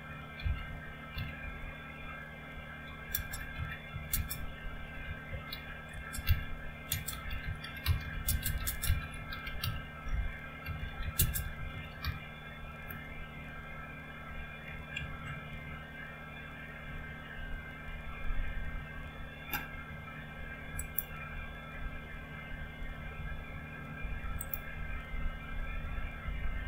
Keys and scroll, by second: 0.0-12.4 typing, 12.6 Return, 15.2-15.9 typing.